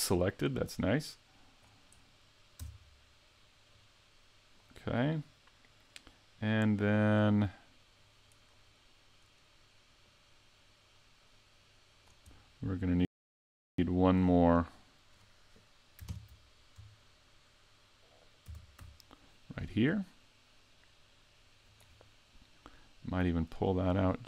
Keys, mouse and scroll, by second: 2.6 Tab, 3.7 click, 6.7 middle click, 8.7 middle click, 10.0 click, 12.3 middle click, 16.1 ctrl+KP_3, 18.5 shift+d, 19.3 shift+d, 21.8 click, 22.2 middle click, 23.7-24.2 scroll up 2.